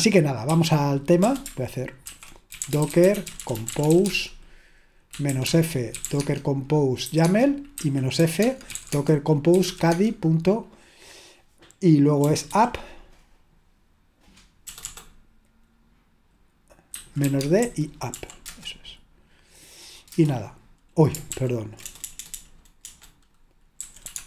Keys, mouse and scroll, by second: 0.0 click, 0.5 typing, 2.1 ctrl+l, 2.3-10.1 typing, 12.3-12.6 typing, 14.6 BackSpace, 14.8 BackSpace, 16.8-18.7 typing, 18.4 Return, 20.2 Return, 21.3 ctrl+p, 21.9-24.2 typing.